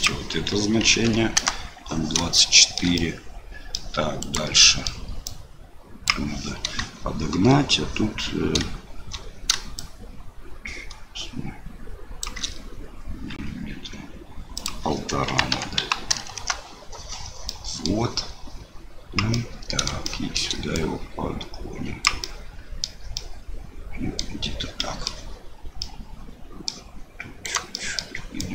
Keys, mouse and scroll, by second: 0.0-1.8 drag, 2.4 shift+middle click, 3.1 middle click, 4.2 click, 4.6 middle click, 5.2-6.8 drag, 9.9-12.2 shift+drag, 14.6-16.9 drag, 17.6 middle click, 19.4 middle click, 20.1 shift+middle click, 20.8-22.0 drag, 22.3 middle click, 23.3 middle click, 24.9 middle click, 25.9 middle click, 27.4 click, 27.7 middle click, 28.3 click.